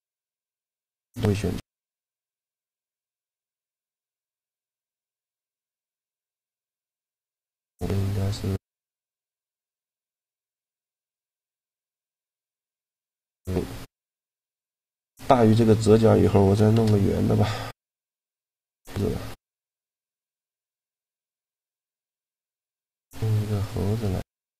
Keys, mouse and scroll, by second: 2.4-4.2 drag, 12.2 middle click, 16.4 shift+a, 18.8-21.0 drag, 21.0 KP_Decimal, 23.0 a.